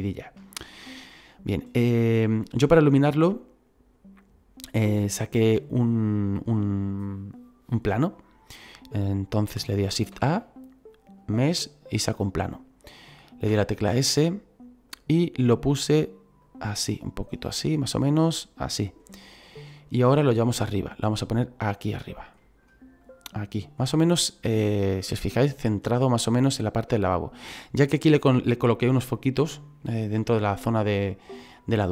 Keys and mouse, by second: 0.4 middle click, 1.6 middle click, 5.1 click, 10.1 shift+a, 11.9 click, 13.5 s, 14.9 click, 16.4 click, 19.8 click, 20.3 middle click, 21.0 click, 22.4 middle click, 23.0 click, 23.8 middle click, 25.1 KP_1, 26.9 click, 28.3 middle click, 30.8 middle click.